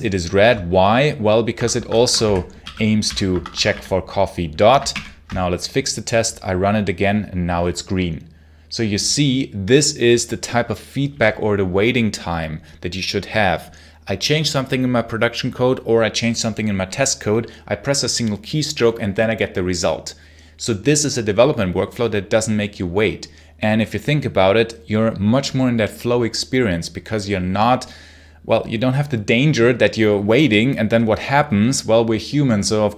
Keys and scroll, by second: 1.4 Escape, 1.6-4.1 typing, 4.8 shift+F10.